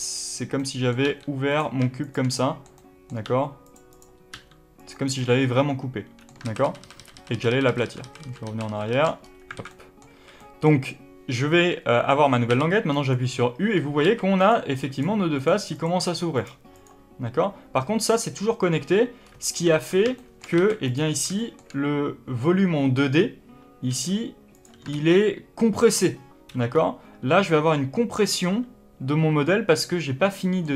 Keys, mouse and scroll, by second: 0.0 click, 0.5-1.5 middle drag, 1.0 g, 1.9 shift+click, 2.3-3.6 middle drag, 3.1 g, 3.8 click, 4.2 g, 4.8 click, 5.0 scroll down 1, 5.1-9.5 middle drag, 6.4 ctrl+z, 9.1-9.5 scroll up 2, 9.5 alt+a, 10.1 a, 10.6-12.4 middle drag, 10.7-12.4 scroll up 2, 12.4 u, 13.7-14.0 scroll up 1, 14.0 alt+a, 14.3 click, 14.8 click, 15.3 click, 15.6 click, 16.3 click, 16.6 click, 19.1-19.6 scroll up 1, 19.6 1, 20.1 shift+middle click, 20.5 alt+a, 20.8 click, 21.1 scroll down 1, 21.3-24.5 shift+middle drag, 23.1 scroll up 1, 23.8 g, 24.5 click, 24.8 ctrl+z, 26.6-28.3 scroll up 2, 28.3-30.7 middle drag.